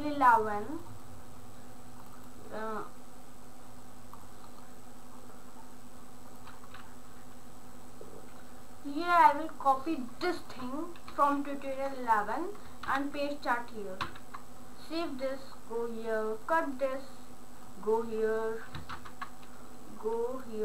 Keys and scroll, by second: 12.9 ctrl+v, 14.0 ctrl+s.